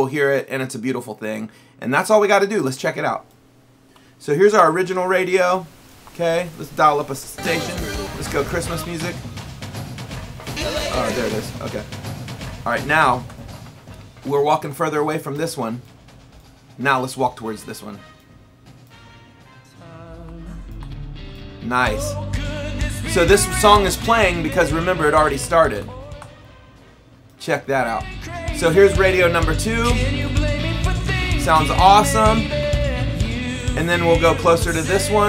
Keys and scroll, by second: 4.0 Up, 7.2 m, 8.5 m, 9.9 n, 10.3 n, 11.0 m, 12.6 Down, 18.5 Up, 20.7 Right, 22.2 Up, 23.7 Down, 27.4 Up, 29.5 Up, 30.1 Right, 31.0 Down, 32.5 Down.